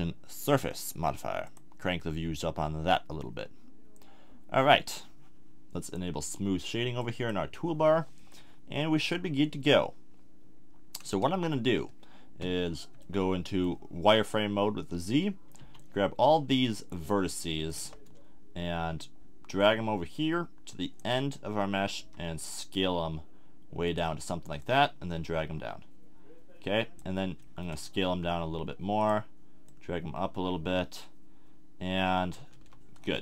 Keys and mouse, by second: 1.4-4.7 drag, 7.0 click, 8.9-11.0 middle drag, 11.0 Tab, 12.4 z, 15.6-17.4 drag, 15.6 b, 19.6 click, 22.0 s, 23.9 click, 27.2 middle click, 28.1 s, 29.1-31.3 drag, 31.6 middle click, 32.5 z, 33.1 middle click.